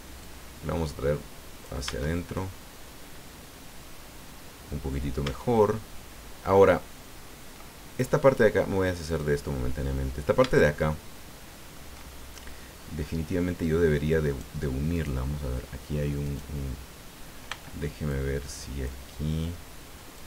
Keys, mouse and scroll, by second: 0.2-1.8 drag, 1.8 Tab, 2.7-5.1 middle drag, 5.2 Tab, 5.7-6.9 middle drag, 6.9-7.2 scroll up 1, 9.0 click, 9.8 middle click, 10.5-11.9 shift+middle drag, 14.2 right click, 14.9 right click, 16.2 right click, 17.5 b, 18.1 click, 20.1-20.2 drag.